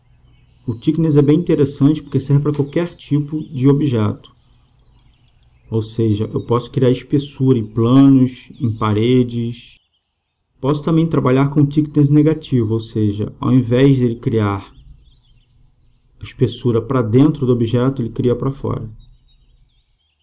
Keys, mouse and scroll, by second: 1.9-3.7 drag, 12.3-14.1 drag, 14.9-16.6 drag, 18.9-20.2 drag.